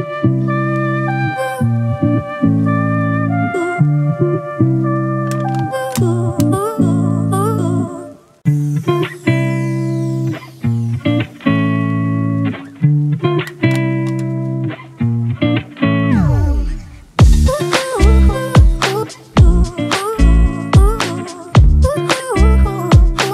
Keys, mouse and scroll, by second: 1.4 double click, 16.5-16.9 scroll down 1, 16.9 scroll up 1, 23.0 ctrl+t.